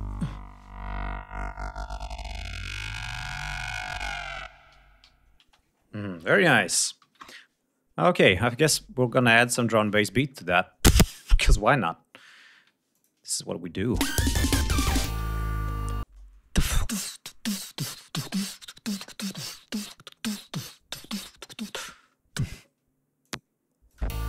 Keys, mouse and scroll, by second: 4.6 g, 5.3 ctrl+space, 5.6 ctrl+scroll down 2, 6.9 ctrl+s, 9.1 click, 9.7-10.7 scroll up 2, 11.5-12.4 scroll up 5, 12.8-13.5 ctrl+drag, 13.5 ctrl+scroll up 2, 13.9 ctrl+space, 15.1 d, 16.0 space, 16.1 scroll down 1, 16.7 click, 17.6 scroll down 1, 19.0 ctrl+scroll down 1, 19.3 ctrl+scroll up 2, 20.6 click, 23.1 click, 23.8 click, 24.0 space.